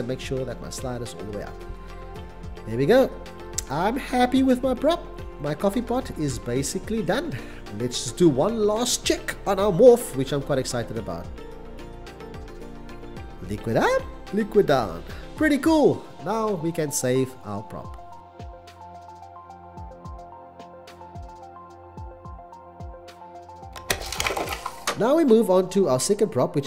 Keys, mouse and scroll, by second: 3.2 x, 12.4 c, 15.4 c, 15.9 c, 19.2 x, 19.3 c, 20.3 c, 20.4 x, 22.9-23.7 typing, 25.7 x, 25.8 c.